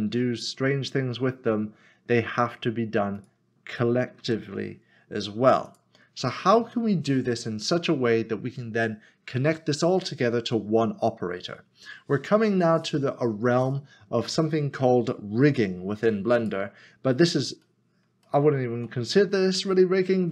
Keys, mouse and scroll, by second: 0.1 typing, 1.4 typing, 3.4 click, 5.2-5.6 scroll down 1, 5.7 click, 16.4 click, 17.6 middle click, 18.2 shift+middle click.